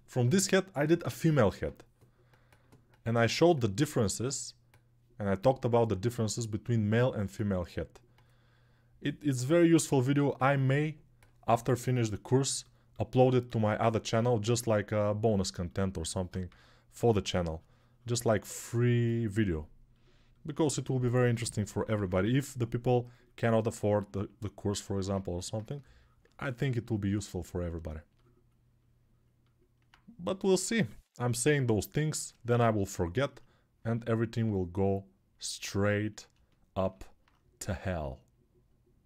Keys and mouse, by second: 7.1 right click, 7.9-13.5 drag, 13.5-15.0 ctrl+alt+right drag, 15.0-25.1 ctrl+alt+drag, 16.2 3, 20.4 1, 21.6 [, 21.7 [, 21.8 [, 22.0 [, 25.2 alt+click, 27.5-36.4 ctrl+alt+drag, 30.1-31.0 typing, 36.4 ctrl+alt+right click.